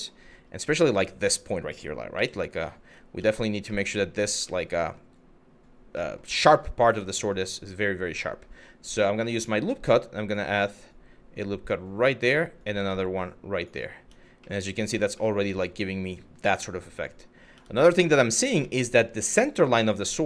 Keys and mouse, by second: 1.8 1, 2.8 Tab, 3.4 middle click, 4.1 middle click, 5.7 middle click, 6.7 middle click, 9.0 click, 10.4 click, 12.2 click, 13.6 Tab, 14.2 middle click, 14.9-15.6 middle drag, 17.2 Tab, 17.7 middle click, 18.4 middle click.